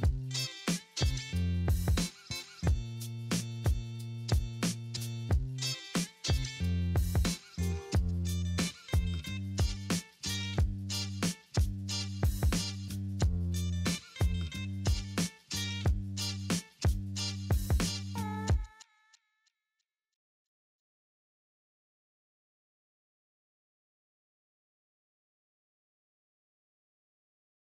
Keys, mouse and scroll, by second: 6.4 right click, 12.1 alt+middle click, 16.5 alt+middle click, 17.0 alt+middle click, 18.1 alt+middle click, 23.6-24.4 scroll down 2, 23.7 alt+middle click.